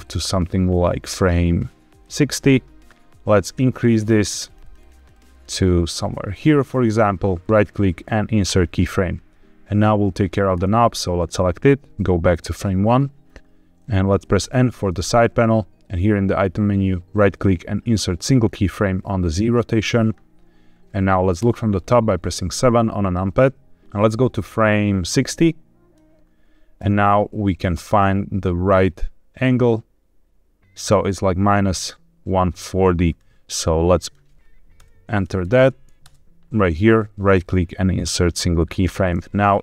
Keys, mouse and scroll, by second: 2.9 right click, 3.4 click, 3.6 click, 3.7 click, 4.1 click, 4.2 click, 4.4 click, 4.6 click, 4.7 click, 4.9 click, 5.1 click, 7.4-8.5 drag, 7.4 right click, 8.5 right click, 10.5 click, 11.9 click, 14.3 n, 17.0-18.5 drag, 17.0 right click, 21.3 KP_7, 23.8 Escape, 23.8 r, 24.0-25.9 drag, 26.7 r, 33.0 right click, 33.9-36.0 drag, 37.2-38.3 drag, 37.2 right click, 39.5 click.